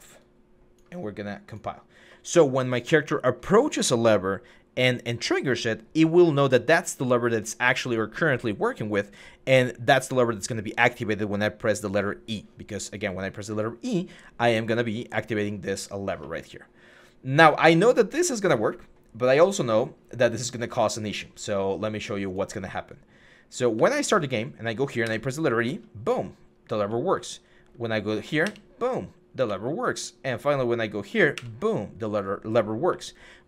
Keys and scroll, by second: 18.2 f, 23.5-24.8 typing, 26.6-28.2 typing, 29.2-31.1 typing, 32.4-33.4 typing.